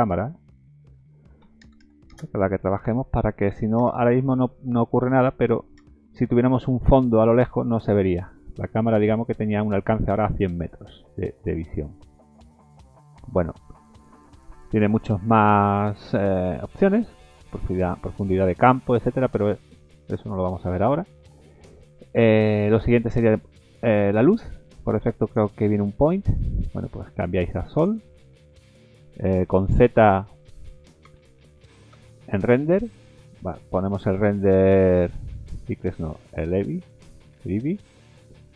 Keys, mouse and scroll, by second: 0.6 click, 1.8 KP_0, 3.8 KP_0, 5.8 KP_0, 6.8-7.9 scroll up 7, 7.9 scroll down 1, 8.0-8.3 scroll down 3, 8.3 middle click, 8.6-9.2 scroll down 8, 9.9 scroll down 5, 11.0 scroll down 2, 11.3 middle click, 11.8-13.0 scroll up 13, 13.0 middle click, 13.6 middle click, 13.9-14.3 scroll down 3, 15.0-15.6 scroll down 2, 19.7 middle click, 20.2 shift+middle click, 21.0 scroll up 1, 21.3 middle click, 23.3 click, 25.2 click, 25.7 middle click, 26.4 shift+middle click, 27.7 click, 28.2 middle click, 31.0 z, 32.7 middle click, 34.7 click, 35.9 click, 37.7 middle click, 38.2-38.5 scroll up 7.